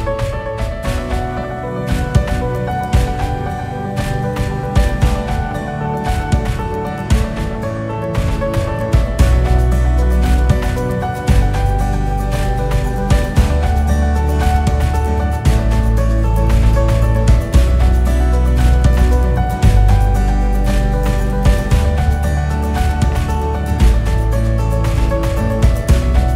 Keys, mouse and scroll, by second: 0.0 KP_6, 1.2 KP_8, 4.7 click, 5.5-9.0 right drag, 9.0-14.2 drag, 15.0-16.6 drag, 17.5-19.0 drag, 19.5 scroll down 2, 20.2 KP_0, 20.9 scroll up 5, 21.5-23.4 scroll down 2, 25.4-26.2 drag.